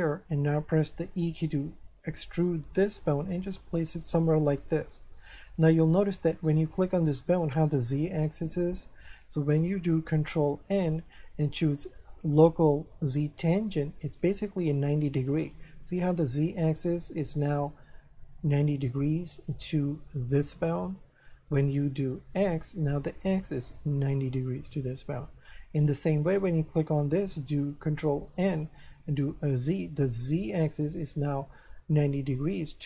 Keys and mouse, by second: 1.1 e, 3.9 click, 4.3 middle click, 6.3 right click, 6.8 middle click, 10.5 ctrl+n, 13.8 click, 16.9 middle click, 21.6 ctrl+n, 22.4 click, 25.1 middle click, 26.3 right click, 27.8 ctrl+n, 29.3 click, 31.2 middle click.